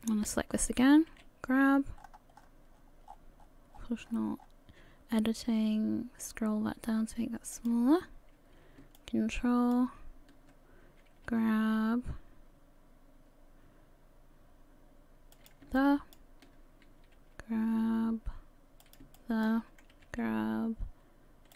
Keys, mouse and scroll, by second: 0.1 shift+right click, 1.1 g, 9.0 ctrl+click, 11.3 g, 15.8 ctrl+click, 17.1 g, 19.1 ctrl+click, 19.9 g.